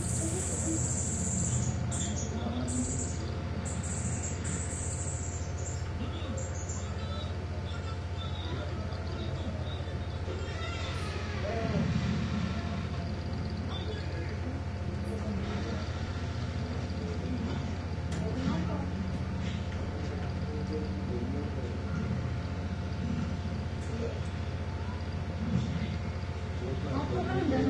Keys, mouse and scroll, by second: 1.8-4.8 drag, 5.0-5.4 ctrl+scroll down 1, 6.2-6.6 ctrl+scroll down 1, 7.9 click, 10.9 ctrl+click, 12.6 ctrl+z, 14.5 click, 15.9 ctrl+z, 16.8-19.3 drag, 19.3-20.9 ctrl+scroll up 2, 22.5 click, 23.5-24.0 ctrl+scroll down 1, 25.1-26.4 drag, 27.5 click.